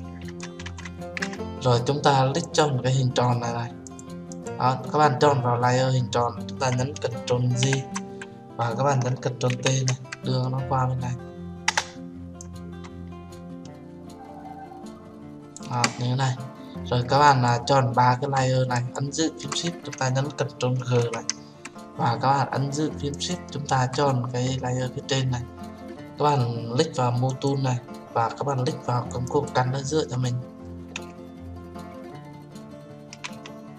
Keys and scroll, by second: 7.6 ctrl+j, 9.5 ctrl+t, 11.6 Return, 20.9 ctrl+g.